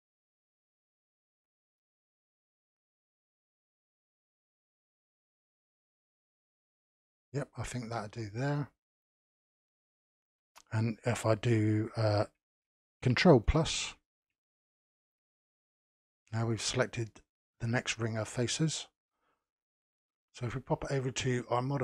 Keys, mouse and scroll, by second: 0.6 click, 1.2-3.5 middle drag, 3.5-3.9 scroll up 1, 3.9-5.4 middle drag, 5.4 click, 6.0-9.1 middle drag, 9.2 click, 10.0-10.4 scroll down 1, 10.4-13.5 middle drag, 13.5 ctrl+KP_Add, 14.4-14.9 scroll up 4, 14.9-18.2 shift+middle drag, 18.2-20.9 scroll down 1, 20.9 click.